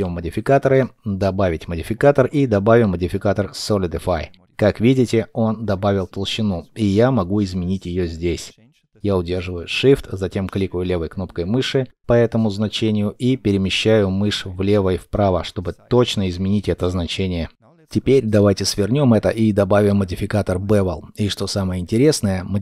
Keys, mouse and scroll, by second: 11.6 shift+click.